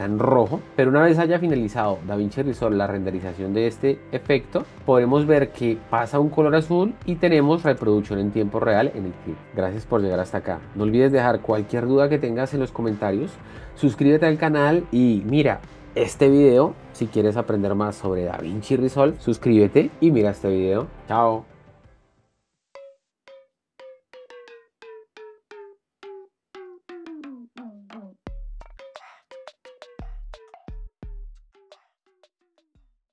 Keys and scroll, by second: 8.0 space.